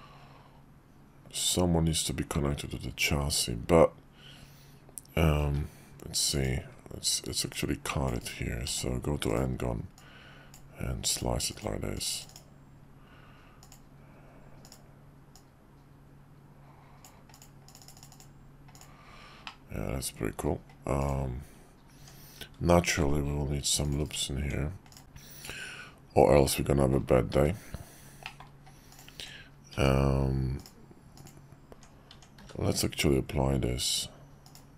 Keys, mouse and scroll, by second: 6.3 click, 7.5-8.3 drag, 8.6 d, 9.9-10.5 drag, 13.6 click, 14.6 click, 15.3-17.0 drag, 18.7 click, 19.4 middle click, 21.0 click, 21.9 Tab, 23.0 ctrl+r, 24.4 Tab, 25.0-27.0 middle drag, 28.2 middle click, 29.1 Tab, 31.1 click, 32.4 q.